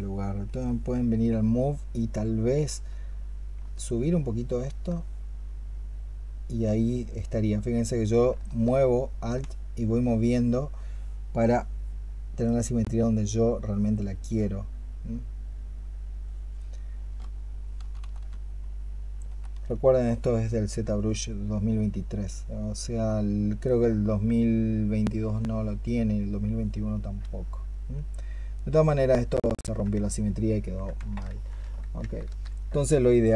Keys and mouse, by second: 3.6 alt+click, 8.5 alt+click, 17.6 ', 17.9 ', 19.1 i, 19.4 i, 28.6 double click, 29.0 double click, 31.1 ctrl+z, 31.5 ctrl+z.